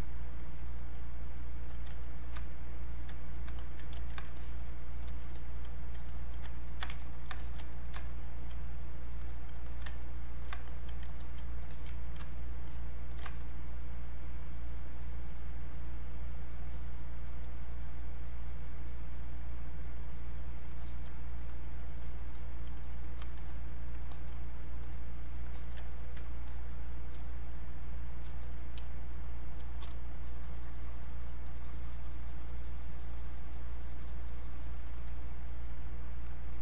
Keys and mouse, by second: 2.1 ctrl+click, 3.2 ctrl+right click, 3.6 click, 3.9 ctrl+z, 4.4 alt+click, 4.9 click, 6.1 alt+click, 6.6 ctrl+right click, 7.0 ctrl+click, 7.7 ctrl+right click, 8.2 alt+click, 9.7 alt+click, 10.0 ctrl+right click, 10.7 alt+click, 11.2 alt+click, 11.7 alt+click, 12.7-15.8 ctrl+shift+drag, 15.9 click, 19.3 click, 23.0 alt+click, 23.5-25.6 drag, 25.6 alt+click, 25.9 ctrl+right click, 26.5 click, 27.2 space, 27.6 click, 27.7 space, 28.5 click, 28.8 space, 29.2 click, 29.3 space, 30.1 shift+click, 31.4-35.0 shift+drag, 35.0 click.